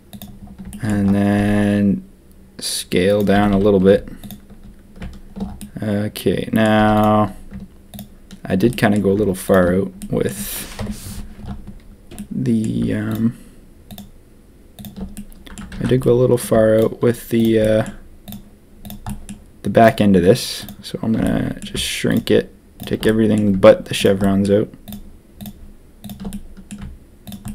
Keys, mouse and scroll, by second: 0.7 shift+middle click, 3.3 a, 3.5 a, 5.5-6.6 middle drag, 6.7 z, 7.9 shift+click, 8.7 click, 9.9 click, 10.7 KP_7, 12.1 click, 13.0 shift+click, 13.8 shift+click, 14.7 shift+click, 15.1 click, 15.7 ctrl+z, 16.0 click, 16.7-17.8 shift+drag, 18.2 shift+click, 18.8 shift+click, 19.0 shift+click, 21.2 click, 22.0 shift+click, 23.0 click, 23.9 shift+click, 24.2 shift+click, 24.8 shift+click, 25.3 shift+click, 26.0 shift+click, 26.3 middle click, 27.2 shift+click, 27.4 shift+click.